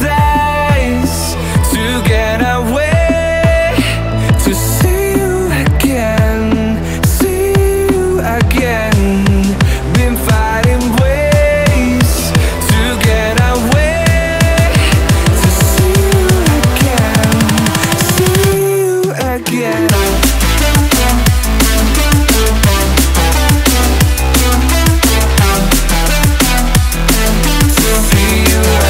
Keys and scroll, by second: 1.3 ctrl+j, 17.2 ctrl+u, 19.5 ctrl+u.